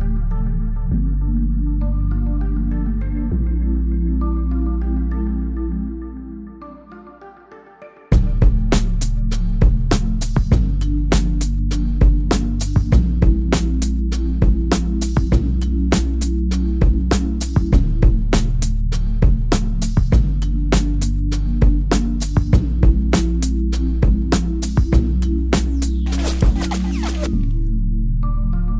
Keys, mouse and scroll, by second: 2.9 click, 4.3 click, 9.9 ctrl+Num_Lock, 10.0 ctrl+m, 10.9 click, 16.5 click, 16.7 ctrl+m, 16.9 scroll down 1, 17.1 click, 18.4 scroll, 18.5 click, 28.4 click.